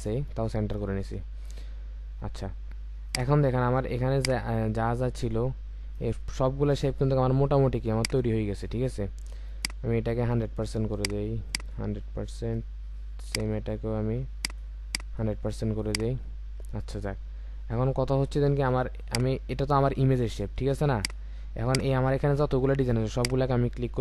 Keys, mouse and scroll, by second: 0.6-1.0 alt+scroll up 1, 9.5 ctrl+click, 13.3 ctrl+click, 16.8-17.7 alt+scroll down 1, 17.7-18.4 alt+scroll up 1, 19.0 ctrl+click, 23.1 shift+click.